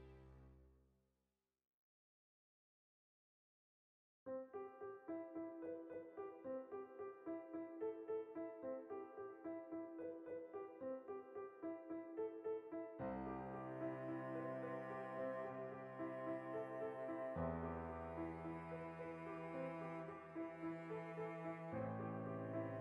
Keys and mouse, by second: 1.2 middle click, 5.3 middle click, 5.7 \, 6.1-7.0 ctrl+middle drag, 7.0 right click, 7.1-8.3 shift+middle drag, 8.0 shift+d, 8.3 click, 8.9 alt+p, 10.4 click, 11.3-14.6 shift+middle drag, 12.6 alt+r, 13.3 alt+q, 14.2 Tab, 14.6 alt+right click, 15.1 shift+s, 15.6 Tab, 16.0-17.1 drag, 17.1 shift+middle click, 17.5 Tab, 17.8 a, 18.2 Tab, 18.4 ctrl+middle click, 18.6 r, 19.9 shift+click, 20.2 alt+q, 20.4 shift+middle click, 21.2 r.